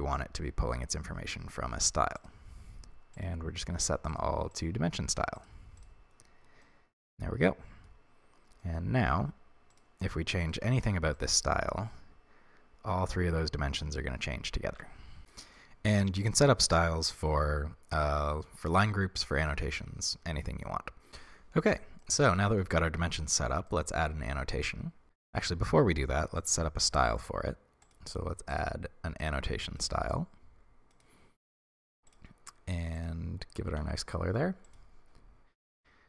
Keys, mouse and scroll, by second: 3.2-6.6 drag, 6.6-11.2 middle drag, 8.2-8.6 scroll up 1, 11.2 click, 14.7 ctrl+z, 15.2-29.3 shift+middle drag, 25.0 Tab, 29.3-31.0 drag, 33.7 ctrl+v, 34.7-35.0 drag, 35.0-35.9 scroll down 1.